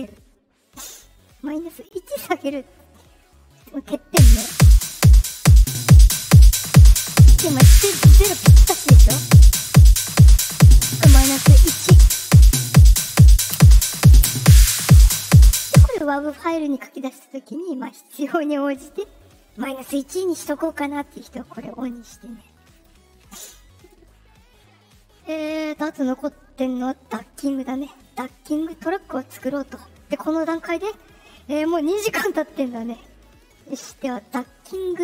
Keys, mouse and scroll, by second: 2.3 ;, 4.0 space, 5.6 click, 9.5 click, 15.6 space, 18.1 click, 21.0 click, 21.7 click, 22.7 click, 27.9 click.